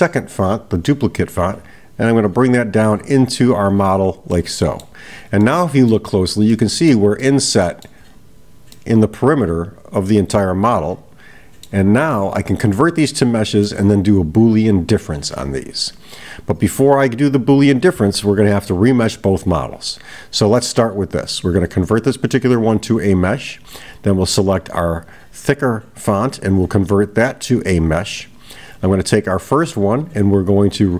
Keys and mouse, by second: 0.4-4.0 drag, 4.3-5.0 middle drag, 5.4-6.0 middle drag, 6.5-7.0 middle drag, 7.2-8.0 middle drag, 8.8-11.8 middle drag, 12.1-13.9 middle drag, 21.6-22.8 right drag, 23.6 click, 26.4-27.8 right drag, 28.8 click.